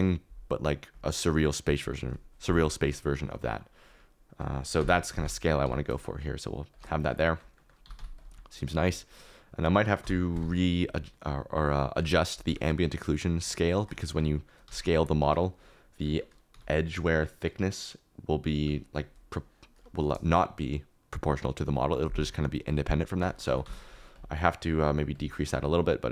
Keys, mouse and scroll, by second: 3.3 middle click, 4.7 KP_1, 5.6 g, 7.8 g, 7.9 x, 10.0 KP_1, 11.9 s, 12.4 g, 13.7 shift+right click, 14.6 s, 15.1 Escape, 15.6 KP_Decimal, 16.5 s, 18.5 Escape, 23.2 middle click, 23.4 g, 23.6 y, 25.1 click.